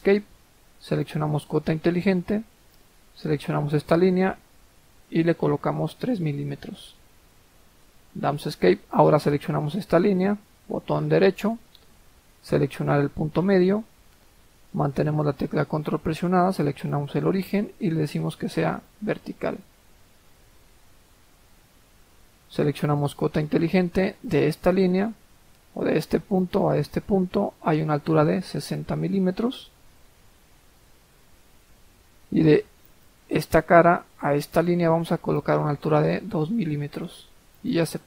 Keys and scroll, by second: 5.7 3, 6.0 Return, 7.1 Escape, 28.7-29.1 typing, 29.5 Return, 35.9 2.